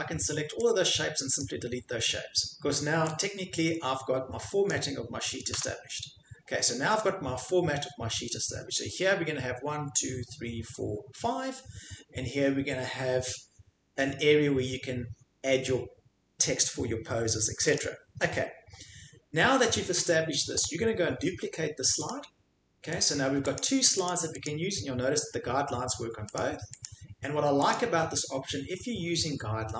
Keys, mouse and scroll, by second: 1.4 click, 4.6 click, 5.5 Delete, 17.7 click, 20.6 right click, 22.1 click, 23.0 click, 23.6 click, 23.6 scroll, 24.1 click, 24.5 click, 26.4 click, 26.8 click, 27.7 click.